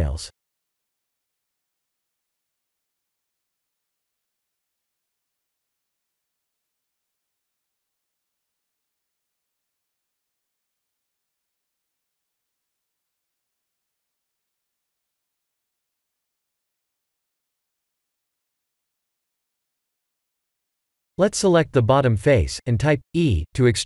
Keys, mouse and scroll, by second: 3.1 s, 4.8 g, 6.2-6.9 scroll up 9, 6.8 shift+middle click, 8.1 shift+middle click, 9.1-9.6 scroll up 2, 9.8 s, 10.6 g, 11.6 s, 15.3 click, 15.7 Tab, 16.2 1, 16.5 click, 16.7 b, 16.9 click, 17.3 g, 19.0 click, 19.1 click, 19.8 Tab, 20.2 click, 21.1 Tab, 21.3 3, 21.8 click, 22.3 e, 23.0 g, 23.7 click.